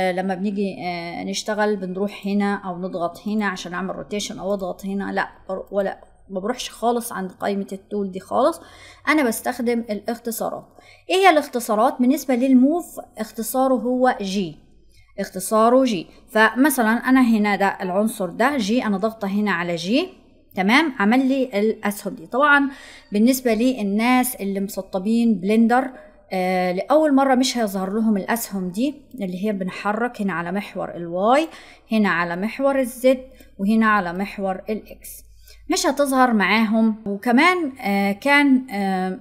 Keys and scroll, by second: 14.1 g.